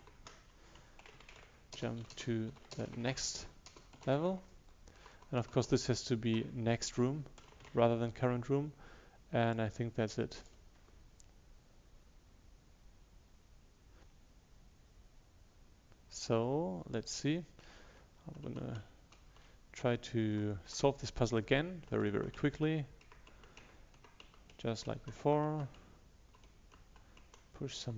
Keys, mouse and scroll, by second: 0.9-3.1 typing, 6.2 shift+Left, 7.3-8.2 typing, 9.5-17.9 drag, 18.5 Right, 18.5 Left, 18.8 Down, 19.2 Left.